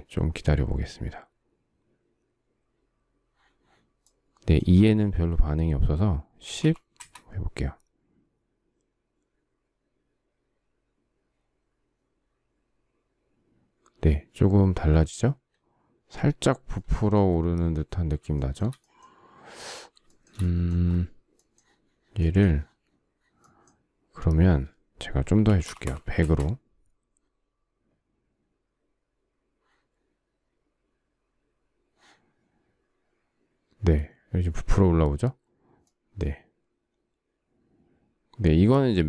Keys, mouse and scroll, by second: 5.8-6.7 typing, 18.0 shift+middle click, 19.7 shift+scroll, 19.8 shift+middle click, 24.8-25.9 typing.